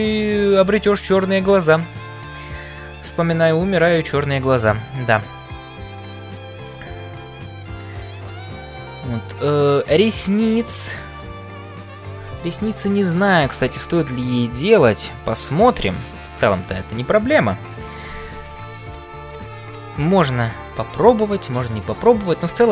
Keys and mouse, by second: 4.0-5.9 middle drag, 8.4 middle click.